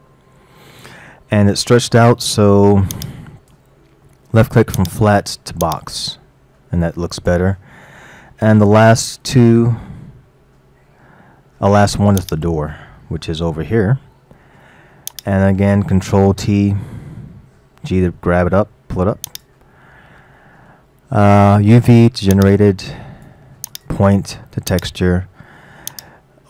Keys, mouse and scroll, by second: 3.0 click, 4.8-6.6 drag, 6.6-7.2 scroll up 2, 7.2-7.6 scroll down 3, 8.1 scroll down 1, 8.7 scroll down 1, 10.4-10.7 scroll down 5, 10.9 scroll up 3, 12.2 click, 13.2-13.6 middle drag, 13.8-15.2 middle drag, 15.2 click, 17.1 ctrl+t, 18.1 g, 20.4-22.4 middle drag, 22.4 click, 23.7-26.4 drag.